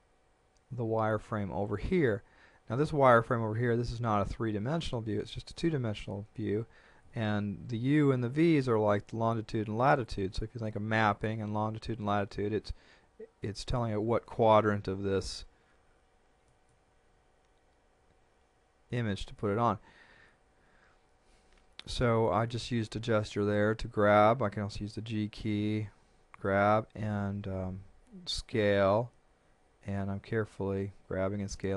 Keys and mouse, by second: 16.5 click, 23.7 click, 24.9 g, 26.3 click, 27.7 s, 29.9 click, 30.9 g.